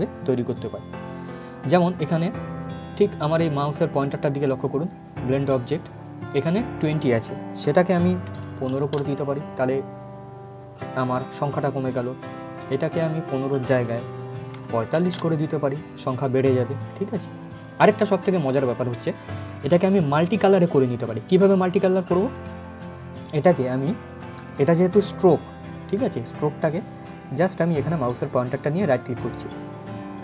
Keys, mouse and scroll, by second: 0.1 click, 5.5-8.3 drag, 12.1 click, 16.4 click, 21.9 click, 28.7 right click.